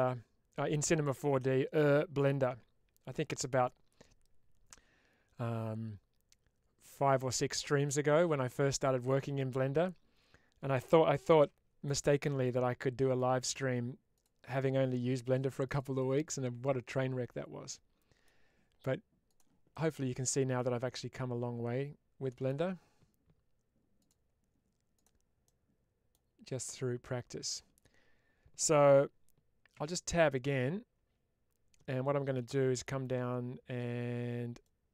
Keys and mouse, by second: 12.1 click, 12.9 click, 16.1-18.6 middle drag, 19.1 click, 19.6-22.3 middle drag, 23.9-25.0 drag, 25.3 middle click, 34.5 click.